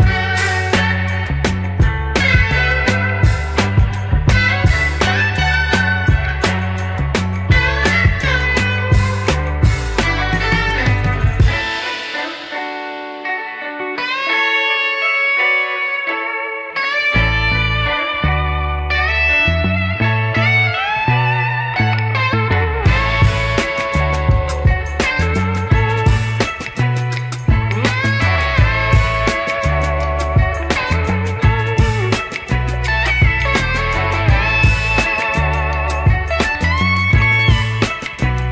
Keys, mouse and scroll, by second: 2.8 r, 4.8 ctrl+z, 5.5 Delete, 6.1 shift+a, 9.1-10.9 drag, 12.1 r, 14.7 s, 17.1 KP_1, 18.0 KP_3, 18.6-19.6 scroll up 3, 19.6-20.8 middle drag, 21.2-21.7 middle drag, 21.9-22.5 middle drag, 22.9-23.3 scroll up 2, 23.3 Tab, 24.1 Tab, 24.6 ctrl+a, 25.2 Tab, 25.9 click, 26.6 3, 26.8 click, 27.6 ctrl+b, 32.9 Tab, 33.9 middle click, 34.5 KP_1, 35.5 Tab, 37.1 click, 38.0 1, 38.4 click.